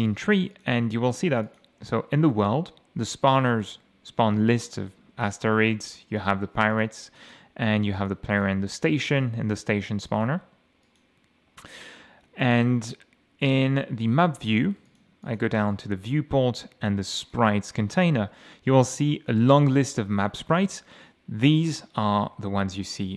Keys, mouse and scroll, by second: 0.5 click, 1.5 click, 3.5 click, 3.9-4.3 scroll down 1, 4.4 scroll down 1, 5.0 scroll up 1, 6.2 click, 6.7 click, 7.2 click, 8.0 click, 8.3 click, 9.5 click, 10.1 click, 10.8 click, 14.0 click, 14.9 click, 15.2 click, 15.7 click, 17.2 click, 18.0-19.2 scroll down 6, 19.4-19.7 scroll down 2, 19.9 scroll down 2, 20.4-20.9 scroll up 2, 21.6 click, 22.3 m.